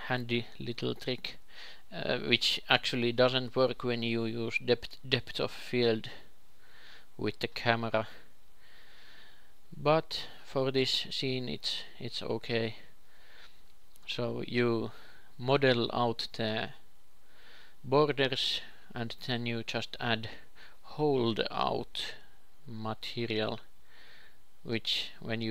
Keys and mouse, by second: 2.0 KP_2, 2.4 KP_3, 2.9-5.4 middle drag, 3.6 e, 4.1 s, 5.4 ,, 5.5 s, 7.8 x, 9.1-10.9 drag, 9.3 x, 11.2 Tab, 12.0 ctrl+shift+KP_2, 12.3 ctrl+shift+KP_3, 15.2-21.5 ctrl+drag, 22.1 x.